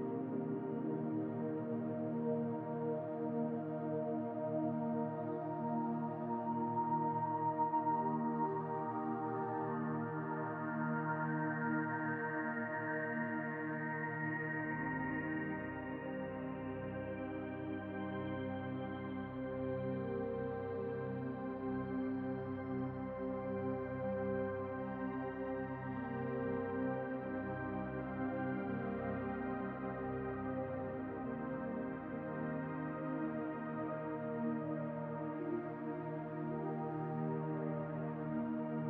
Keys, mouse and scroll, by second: 0.4 alt+shift+click, 1.1 alt+shift+click, 2.0 scroll up 1, 2.1 middle click, 3.0 alt+shift+click, 4.0 click, 5.0 ctrl+KP_Subtract, 6.2 click, 6.6 click, 7.3 click, 7.9 click, 8.0 click, 8.7 o, 10.5 middle click, 11.1 scroll down 1, 11.4 2, 12.3 alt+click, 12.8 middle click, 13.2 alt+shift+click, 13.5 middle click, 14.2 alt+shift+click, 14.4 middle click, 14.9 alt+shift+click, 15.6 middle click, 16.1 e, 18.5 s, 19.1 middle click, 20.0 click, 21.0 middle click, 22.6 Tab, 23.5 click, 23.9 click, 25.0 click, 27.2 click, 28.0 click, 29.1 middle click, 29.8 click, 31.2 click, 32.3 middle click, 33.0 scroll up 1, 33.1 middle click, 34.8 click, 35.6 click, 37.0 click, 38.5 click.